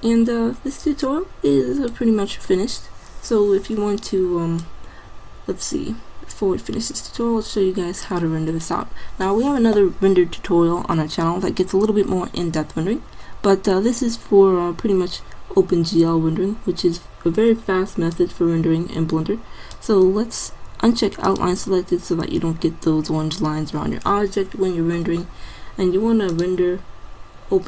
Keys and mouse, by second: 18.3-19.8 drag, 21.3-23.0 drag, 26.4-27.6 drag.